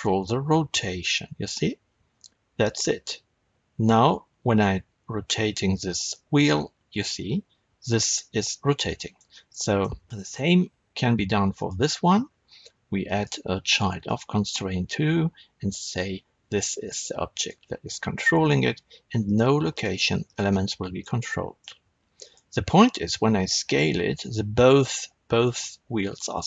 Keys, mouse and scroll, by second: 6.9 right click, 8.9-11.5 shift+middle drag, 11.5 click, 13.0-15.9 drag, 19.2 click, 19.6 click, 20.2 click, 20.9-22.1 middle drag, 22.1 click, 23.1 s.